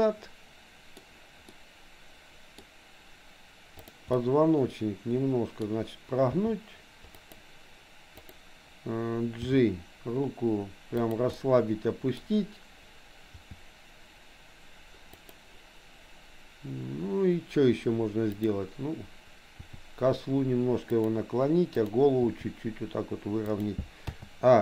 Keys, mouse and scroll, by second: 1.5-2.6 middle drag, 3.9 click, 4.1-5.8 middle drag, 6.4 r, 8.3 click, 9.5 g, 11.4 middle click, 13.3 g, 18.4 click, 19.5 r, 21.9 click, 22.3 r, 24.1 a.